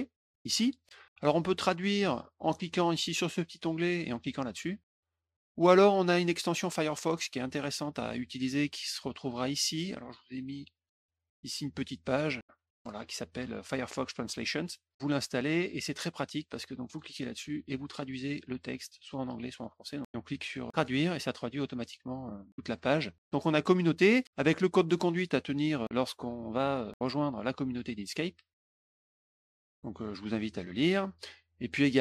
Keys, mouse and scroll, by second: 7.4 click, 10.7 click, 14.9 click, 15.7 click, 16.8 click, 26.3 middle click, 29.0 click, 29.3 click, 30.5 click.